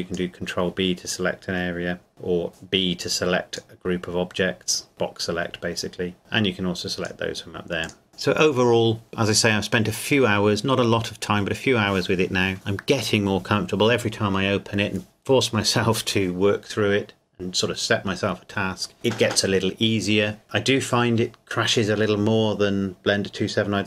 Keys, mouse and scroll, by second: 2.5 b, 3.0 click.